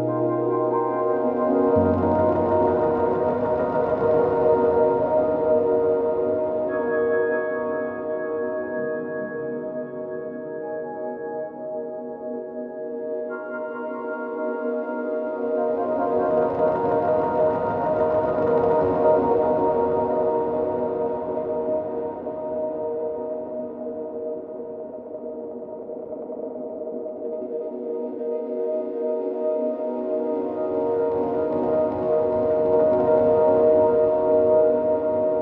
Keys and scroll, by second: 33.7 ctrl+t.